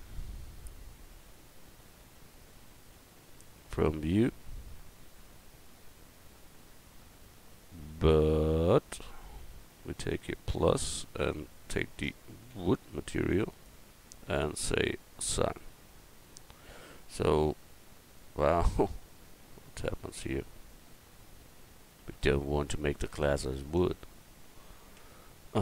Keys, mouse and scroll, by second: 1.6-2.9 drag, 2.9 u, 10.3-13.6 drag, 15.5-17.0 drag, 25.0 Tab.